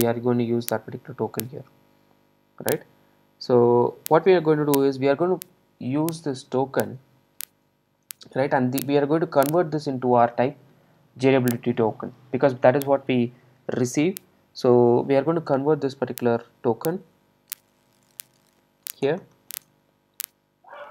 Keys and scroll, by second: 8.1 super+z, 9.4 super+z, 20.7 super+v.